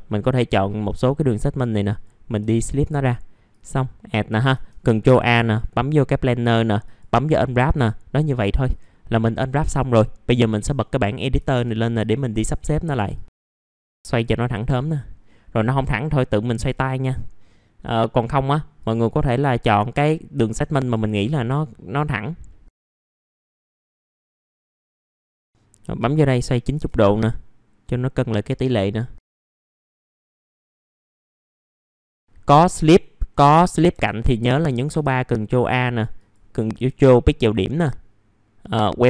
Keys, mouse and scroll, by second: 0.2 middle click, 0.3-1.0 scroll down 1, 1.0 middle click, 1.3 scroll down 1, 1.7 right click, 2.7-8.7 drag, 8.7 click, 12.0 middle click, 12.8 click, 13.7 middle click, 13.7-14.9 scroll down 1, 14.9 click, 16.1 middle click, 16.5 click, 18.2-18.6 scroll up 1, 18.6 middle click, 19.6 click, 22.1-22.7 scroll up 1, 22.7 click, 22.8 middle click, 23.2 click, 23.5 middle click, 23.8 click, 24.2 ctrl+click, 24.7 click, 24.9 middle click, 25.0-25.6 scroll down 2, 25.3 click, 25.6 click, 28.0 click, 29.1 middle click, 29.6 click, 31.0 scroll up 1, 31.1 scroll down 1, 31.5 scroll up 1, 31.8 shift+g, 32.3 scroll up 1, 34.8-35.4 scroll up 2, 37.0 ctrl+click, 38.3 right click.